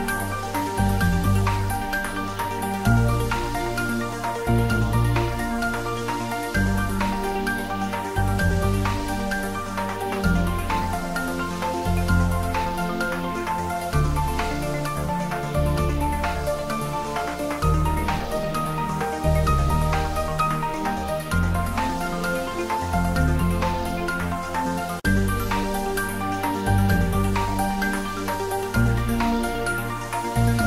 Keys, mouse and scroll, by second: 0.8 ctrl+middle click, 1.2 shift+middle click, 1.8 Tab, 2.6 ctrl+r, 3.1 click, 4.3 ctrl+z, 5.0 click, 5.4 Tab, 6.7 ctrl+r, 6.9 click, 7.8 ctrl+middle click, 8.2 middle click, 9.0 Tab, 9.8 ctrl+r, 10.2 click, 11.6 Tab, 12.5 ctrl+r, 12.7 click, 13.5 Tab, 14.3 ctrl+middle click, 14.7-16.1 middle drag, 16.1 click, 18.8 shift+middle click, 19.6 click, 21.0 shift+click, 22.0 ctrl+j, 25.0 click, 25.5 shift+click, 26.4 ctrl+j, 27.2 click, 29.6 ctrl+z, 29.9 shift+click, 30.6 ctrl+z.